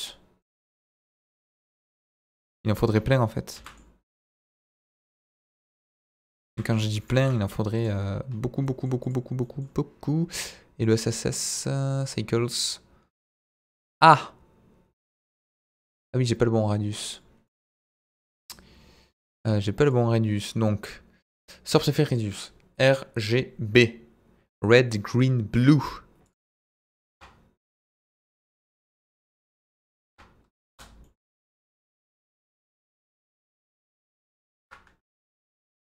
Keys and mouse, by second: 0.0-0.4 middle drag, 1.9-2.5 middle drag, 3.5 shift+d, 4.3 shift+click, 4.5 shift+d, 5.1 click, 5.3 shift+d, 6.2 click, 6.4 shift+d, 7.0 click, 7.1 shift+d, 7.7 click, 8.6 middle drag, 9.0 click, 9.4 middle drag, 10.8 click, 11.7-12.1 drag, 17.4 middle drag, 26.2-29.3 drag, 30.0 click, 31.0-31.3 middle drag, 31.5-32.8 middle drag, 33.9-35.8 drag.